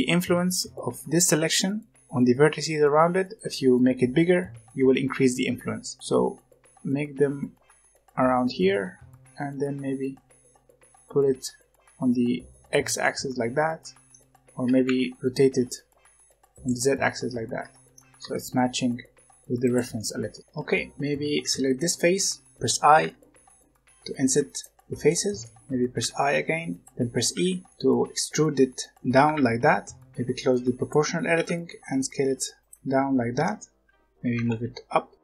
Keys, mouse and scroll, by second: 12.9-14.6 middle drag, 14.6 r, 16.6-18.1 middle drag, 18.1 g, 19.9 middle click, 20.4 Tab, 20.7 middle click, 20.9-21.3 scroll up 1, 21.3 3, 21.6 click, 23.0 i, 24.7-25.9 shift+middle drag, 25.9 i, 27.3 e, 27.7-29.2 middle drag, 29.2 s, 30.8 click, 31.3 s, 33.3 Tab, 33.8-35.2 typing.